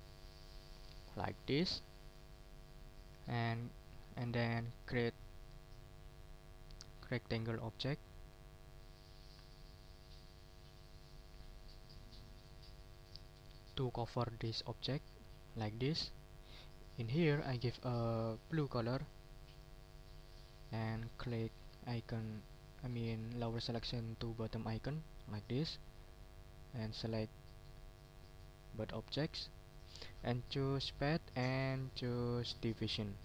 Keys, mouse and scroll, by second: 1.6 middle click, 4.1 click, 7.3 click, 7.8 middle click, 14.8-16.2 drag, 18.0 click, 19.5 click, 20.6 click, 25.3 click, 25.8 middle click, 26.8-28.2 drag, 30.8 click, 33.1 click.